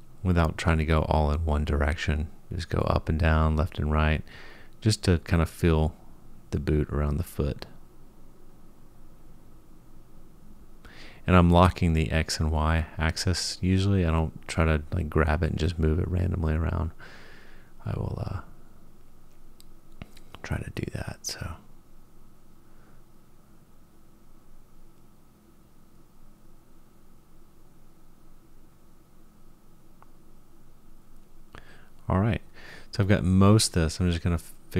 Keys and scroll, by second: 2.2 g, 7.2 g, 20.1 g, 29.5 g.